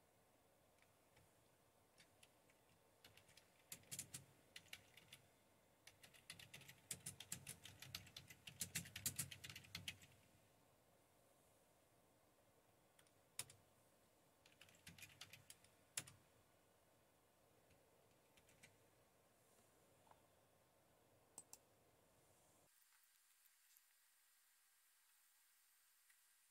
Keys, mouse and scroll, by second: 1.2-10.4 typing, 14.4-15.7 typing, 16.0 Return, 18.4 super+0, 21.4 click, 22.9 super+q.